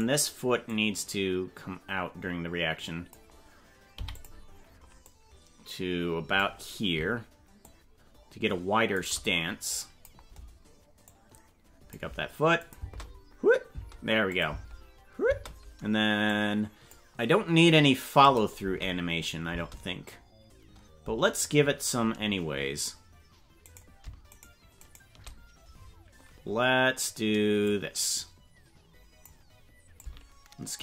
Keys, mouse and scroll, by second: 0.0 right click, 0.7-3.1 drag, 3.9 i, 5.1-6.5 drag, 7.6-9.0 shift+drag, 9.8 click, 11.1 click, 12.7 space, 13.7 space, 14.3 click, 14.5 space, 15.3 space, 16.3 click, 18.3 click, 18.6 space, 19.5 space, 21.4 click, 23.8 right click, 24.4 shift+right click, 24.9 right click, 27.6-29.3 drag, 29.9 shift+click.